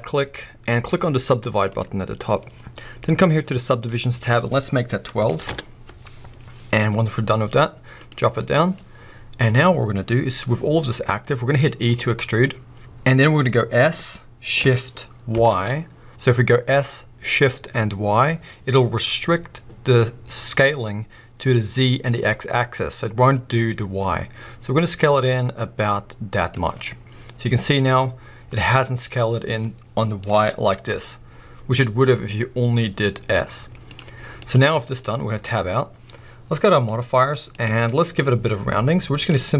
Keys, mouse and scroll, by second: 3.0-5.5 drag, 5.5 Return, 8.0 click, 8.8-11.8 middle drag, 11.8 e, 12.8 right click, 13.8 s, 26.5 click, 26.7 scroll down 2, 26.8-34.0 middle drag, 28.6-29.0 scroll up 2, 30.3 s, 34.0 right click, 34.3 scroll down 2, 34.4-36.7 middle drag, 35.1-35.5 scroll up 2, 35.5 Tab, 36.7 click, 37.5-39.1 middle drag, 37.8-39.1 scroll up 2, 39.1-39.5 drag.